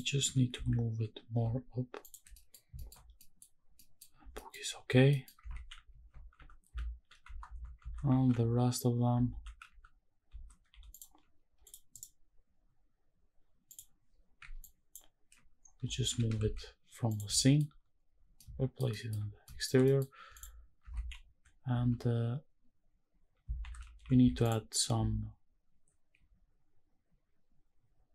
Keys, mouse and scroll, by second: 0.2 g, 0.5 z, 2.0 ctrl+click, 2.3 middle drag, 2.5 scroll down 2, 2.8 shift+middle click, 2.9-3.7 scroll up 3, 3.1 middle drag, 3.7 middle drag, 4.2 scroll down 2, 4.3 middle click, 5.1 middle click, 5.5 shift+`, 11.6 click, 11.9-13.8 right drag, 14.1 scroll down 1, 14.6 ctrl+click, 15.6-16.3 scroll down 3, 16.1 g, 16.5 shift+z, 17.1 click, 17.4 shift+middle drag, 18.4-18.8 shift+middle drag, 18.9 shift+middle drag, 19.3-19.6 scroll up 2, 19.4 shift+middle drag, 19.8 middle click, 20.3 click, 21.0 shift+`.